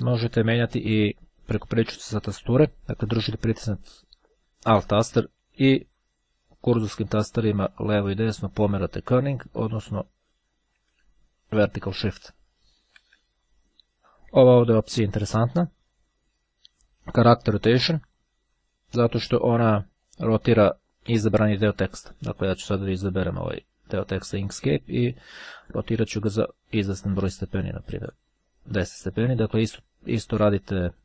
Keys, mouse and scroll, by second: 0.5 click, 5.3 alt+Right, 8.0 alt+Left, 8.6 Left, 9.4 Right, 9.5 Up, 9.7 Up, 11.1 Down, 11.8 Down, 14.0 BackSpace, 18.2 click, 19.4-22.6 drag, 25.2-26.4 drag, 27.2-28.6 drag, 29.0 click, 29.9-31.0 drag.